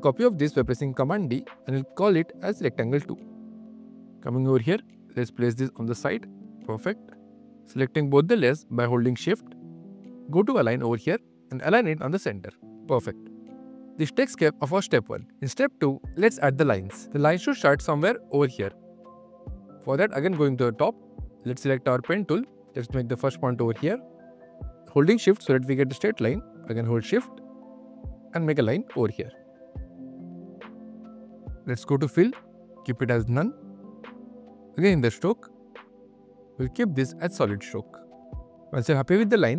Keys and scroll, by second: 6.5 q, 8.4 shift+q, 17.0 q.